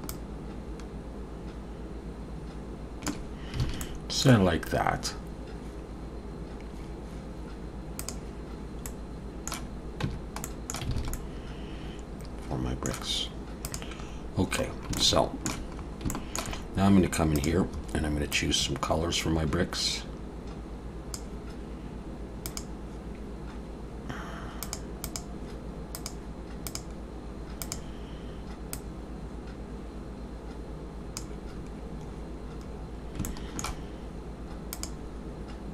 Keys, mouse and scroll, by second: 8.1 click, 8.9 middle click, 10.1 Tab, 10.5 middle click, 11.0 alt+a, 11.1 middle click.